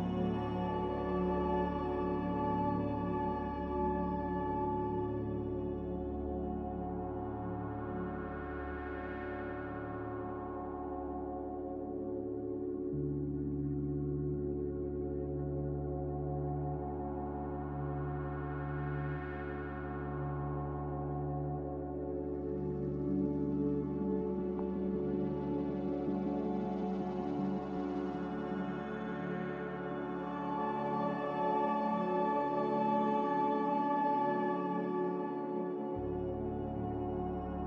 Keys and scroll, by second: 5.8 ctrl+c, 5.9 ctrl+v, 13.3 x, 15.3-16.5 typing, 15.7 Return, 18.5 BackSpace, 18.7 BackSpace, 20.0 typing, 21.0 Return, 22.4 z, 24.2 typing, 24.7 Return, 26.2 n, 34.8 a, 36.8 ctrl+g.